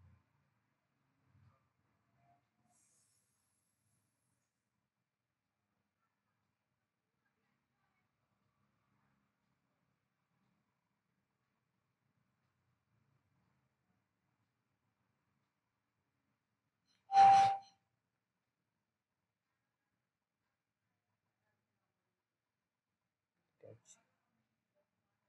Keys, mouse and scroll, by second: 0.0 click, 4.1 right click, 4.8 click, 5.3 scroll down 1, 6.2 middle click, 6.8-7.1 alt+scroll up 1, 7.1 click, 14.6 scroll down 1, 15.1 scroll up 1, 15.7 ctrl+click, 16.8-17.2 scroll down 1, 17.2-17.9 scroll up 1, 17.9 scroll down 1, 21.4 click, 22.9 right click, 23.5 click, 24.0 scroll down 1, 24.7 middle click.